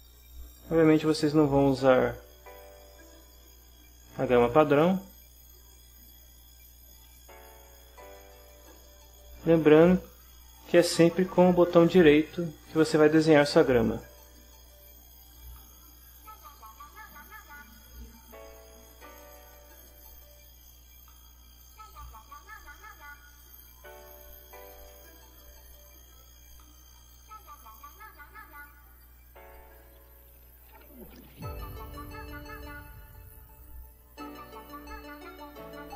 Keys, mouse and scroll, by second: 0.1-0.8 scroll up 1, 1.7-4.8 right drag, 5.8-7.3 drag, 8.0 ctrl+z, 9.7-11.8 middle drag, 11.9-13.8 right drag, 15.2 click, 16.4 click, 21.7 click, 23.3 click, 24.5 click, 27.0 click, 28.1 middle click, 29.5-35.8 right drag.